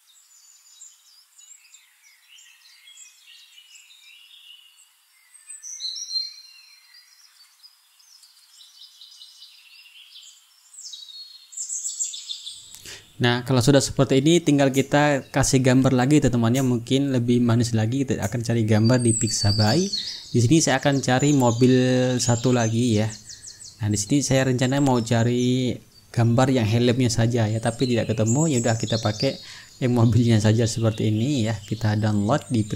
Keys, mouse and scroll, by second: 0.0-2.4 typing, 0.2 click, 0.5 click, 1.0 click, 1.1 ctrl+shift+click, 1.3 ctrl+z, 1.6 ctrl+a, 2.0 ctrl+click, 2.5 click, 2.6 ctrl+v, 2.9 click, 3.5 ctrl+a, 3.5 ctrl+click, 3.6 click, 4.5-7.1 typing, 4.6 click, 4.8 click, 5.1 click, 5.3 ctrl+click, 6.4 ctrl+click, 7.3 click, 8.5 click, 8.9 click, 9.1 click, 9.4 click, 10.2 click, 10.6 click, 11.2 ctrl+click, 11.6 t, 11.6 ctrl+click, 13.1 click, 15.2 click, 16.3 click, 18.4 click, 19.0-19.9 typing, 20.0 Return, 23.0 click, 24.5 click, 25.4-29.1 typing, 29.4 click, 31.9 click.